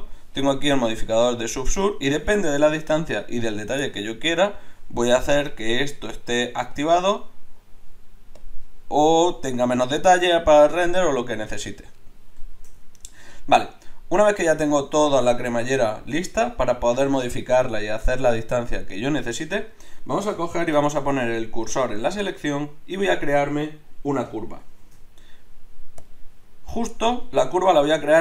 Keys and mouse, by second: 5.5-20.6 drag, 20.6 shift+s, 24.8 shift+a.